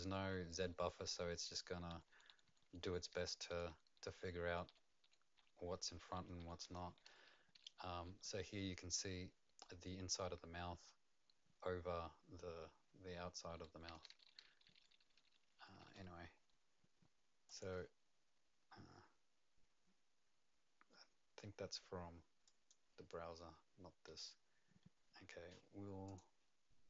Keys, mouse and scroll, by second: 0.0-8.5 typing, 13.9-15.9 typing, 17.4 click, 17.4 typing, 22.4 click, 26.0 click.